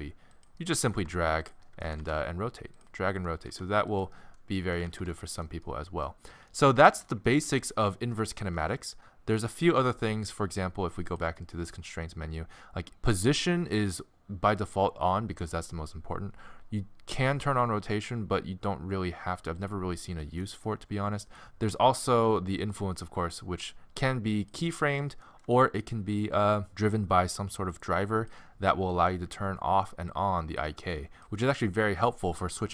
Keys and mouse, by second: 0.9 g, 1.9 r, 3.5 r, 3.9 middle click, 4.9 alt+r, 5.0 alt+g, 9.4-11.9 middle drag, 11.9 click, 12.8-16.9 middle drag, 19.6 click, 20.4 middle click, 21.2 middle click, 21.4 ctrl+z, 22.7-24.8 drag, 24.8-26.1 middle drag, 26.1 click.